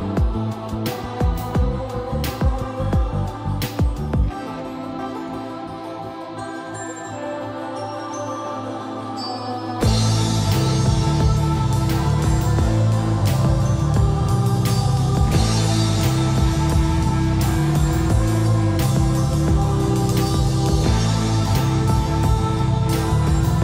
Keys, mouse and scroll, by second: 1.9 middle click, 2.7 shift+middle click, 4.4 scroll down 1, 4.7 shift+middle click, 6.9 click, 8.5 scroll up 1, 8.8 shift+middle click, 10.3-11.3 scroll up 1, 11.3 c, 12.3 Escape, 12.4 scroll down 1, 13.0 m, 13.6 click, 14.9-16.2 shift+middle drag, 16.4 scroll up 1, 17.4-18.6 typing, 18.5 click, 21.6 scroll down 1, 21.9 shift+middle click, 22.9 scroll down 1, 23.2 middle click, 23.5-23.6 scroll up 1.